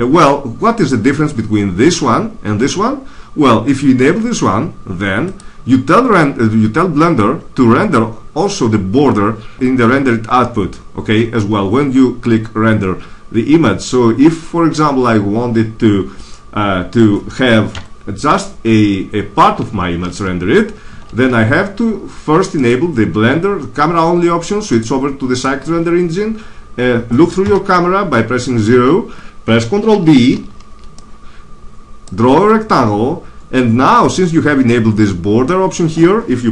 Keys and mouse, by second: 20.8 F12, 20.8 Escape, 24.7-26.2 drag, 27.3 KP_0, 30.3 ctrl+b.